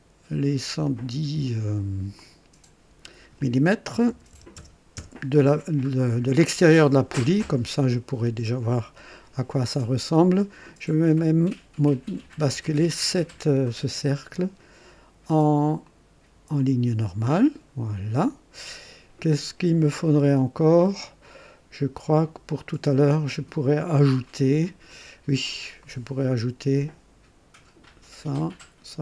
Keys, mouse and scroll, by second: 0.8 click, 2.1 click, 4.0 KP_1, 4.5 KP_0, 4.9 KP_Enter, 6.9-7.2 scroll up 1, 8.4-9.1 right drag, 12.2 click, 15.8 click, 16.5 click, 25.8 click, 27.8 click.